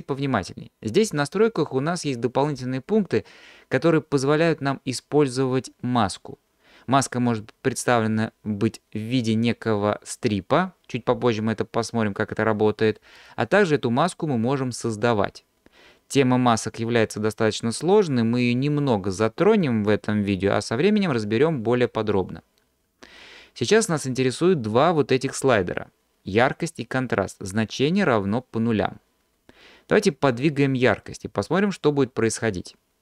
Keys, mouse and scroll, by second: 1.1-3.9 scroll down 1.